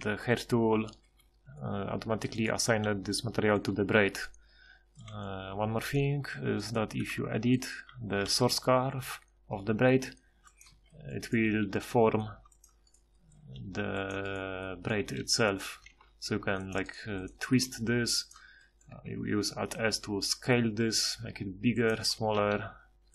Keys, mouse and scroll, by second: 2.8 g, 5.5 z, 7.2 Tab, 8.2 g, 10.7 z, 11.4 g, 13.3 g, 15.0 g, 15.9 ctrl+t, 17.5 ctrl+t, 17.5 ctrl+t, 19.0 alt+s, 22.4 g.